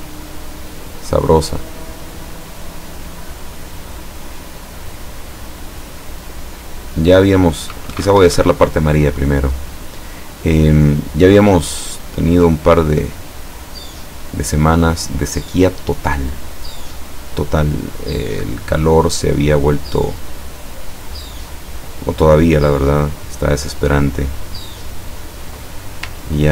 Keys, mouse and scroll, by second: 3.0 click, 8.3 Escape, 16.3 click, 18.9 click, 23.4 click, 24.9 click, 26.4 ctrl+scroll up 2.